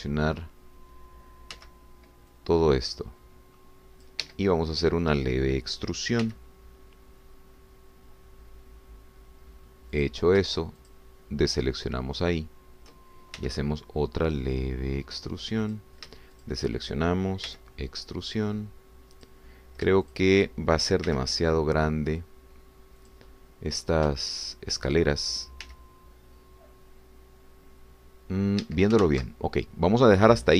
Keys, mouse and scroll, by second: 0.8 click, 2.5 c, 3.4-5.3 drag, 5.2 Escape, 5.6 scroll up 1, 7.2 e, 11.0 click, 12.0 shift+click, 14.4 e, 16.6 click, 17.4 shift+click, 18.5 e, 20.2 click, 21.2 shift+click, 22.1 e, 24.0-25.1 drag, 25.4 shift+click, 26.6 e, 29.6 Escape, 30.0 ctrl+z.